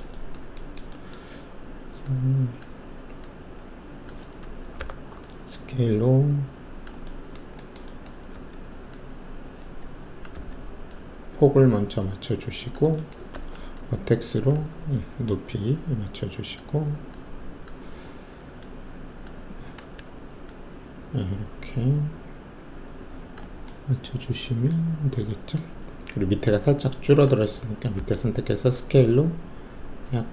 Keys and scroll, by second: 4.7 r, 8.3 alt+w, 10.3 r, 13.3 alt+1, 14.4 w, 19.7 z, 27.9 r.